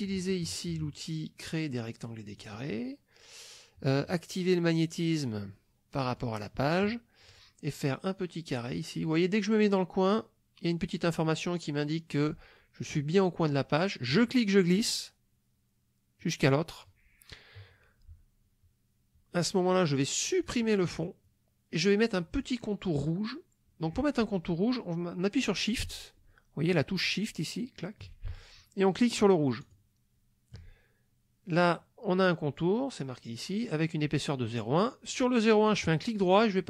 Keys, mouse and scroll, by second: 2.4 click, 6.1 click, 14.1-16.4 drag, 20.5 click, 29.6 shift+click, 35.9 right click.